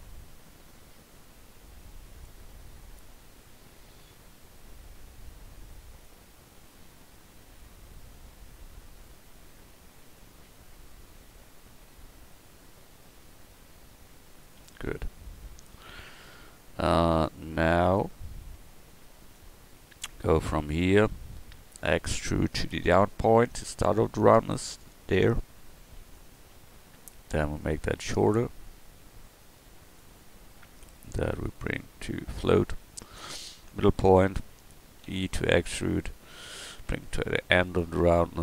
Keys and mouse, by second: 4.5 f, 6.9 g, 17.2 g, 19.9-22.7 drag, 22.7 e, 28.1-30.0 drag, 31.4-32.6 drag, 33.3-35.1 drag, 35.1 e, 38.3 click.